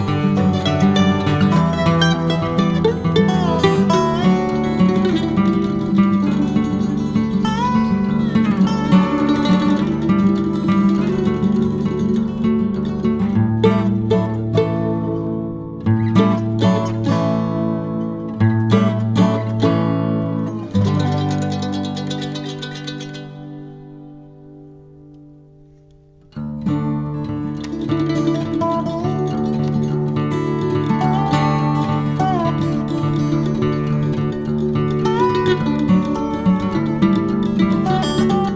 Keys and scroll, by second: 4.1 Escape, 4.2 Escape, 4.7-8.3 typing, 6.8 Escape, 9.6 ctrl+a, 9.8 Escape, 9.9 Escape, 12.0 Escape, 12.2 Escape, 16.2 Escape, 16.4 h, 20.4 space, 22.4 e, 22.5 space, 22.7 Escape, 22.9 Escape, 22.9 h, 24.8 space, 25.0 space, 26.2-27.9 typing, 26.7 Escape, 27.0 Escape, 27.8 Escape, 30.3 space, 30.9 Escape, 31.1 Escape, 35.8-37.4 typing, 37.2 Escape, 38.3 Escape, 38.4 Escape.